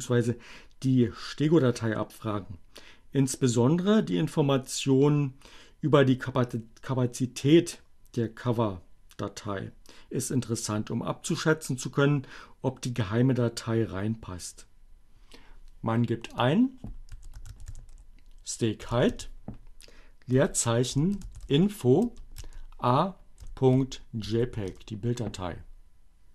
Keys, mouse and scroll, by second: 16.2 click, 16.6-24.0 typing, 24.6 Return.